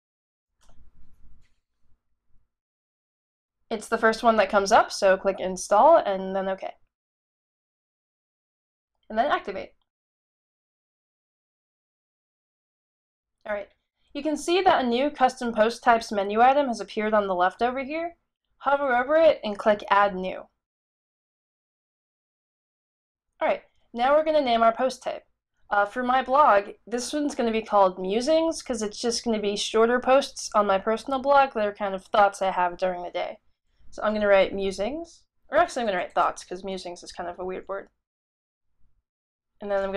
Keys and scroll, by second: 0.0-1.0 typing, 34.1-35.0 typing, 36.6-37.4 typing, 39.0-39.9 typing.